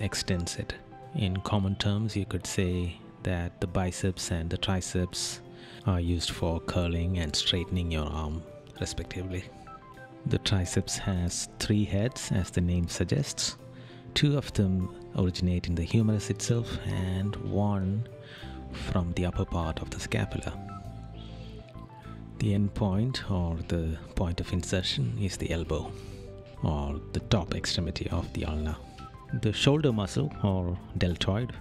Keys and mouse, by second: 3.3 right click, 4.4 right click, 9.8 right click, 12.7 right click, 15.3 right click, 16.4 right click, 19.1 right click, 20.4 right click, 29.9 right click.